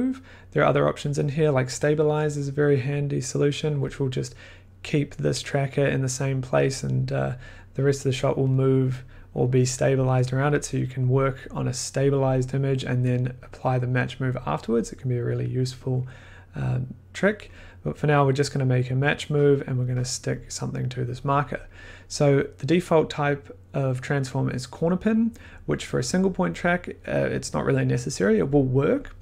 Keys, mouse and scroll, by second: 2.0-3.3 drag, 19.5-24.6 drag.